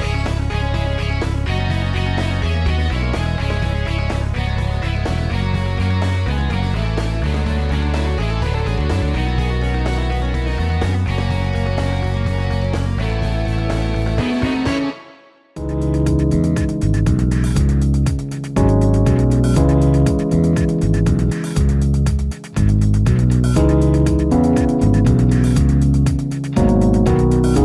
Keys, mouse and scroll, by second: 13.2 e.